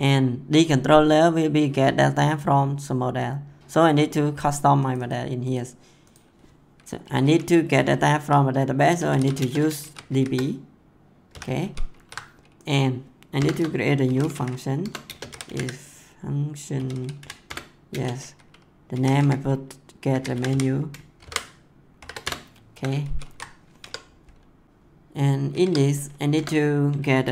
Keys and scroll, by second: 9.0 u, 9.3 space, 9.8 shift+d, 10.1 shift+b, 11.2 ;, 11.6 ctrl+s, 13.3 Return, 13.8-17.8 typing, 14.8 Return, 17.4 Return, 18.9-21.9 typing, 22.2 Return, 23.0 ctrl+s, 23.7 Tab, 25.6 Tab, 26.3 Return.